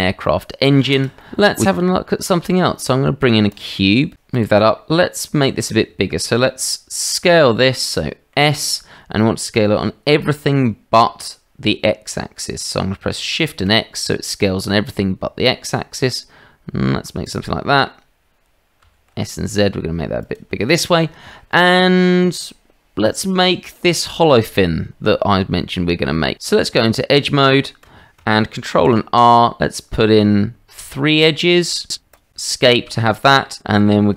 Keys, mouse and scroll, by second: 0.2-1.5 middle drag, 1.5 Delete, 1.5 shift+a, 4.1 g, 6.0-6.3 shift+middle drag, 6.6-7.4 middle drag, 8.0-8.3 drag, 11.6 s, 18.8 s, 21.0 shift+drag, 21.5-22.1 drag, 26.3 Tab, 28.7 ctrl+r.